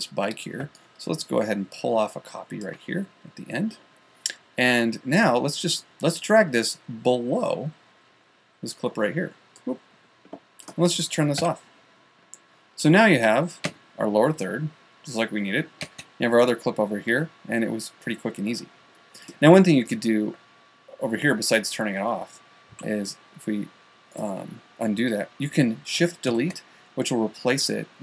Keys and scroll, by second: 11.9 v, 23.2 super+z, 26.7 shift+BackSpace.